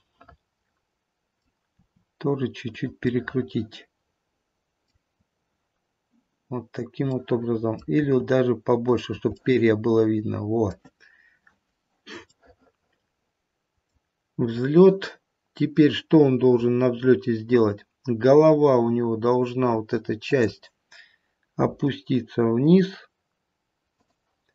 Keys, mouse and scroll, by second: 0.5 middle click, 1.8 r, 3.1 middle click, 3.3 middle click, 7.2 middle click, 8.0 r, 9.2 middle click, 10.3 middle click, 12.3 middle click, 13.6 middle click, 16.3-16.8 scroll down 1, 20.3 click, 21.8 r.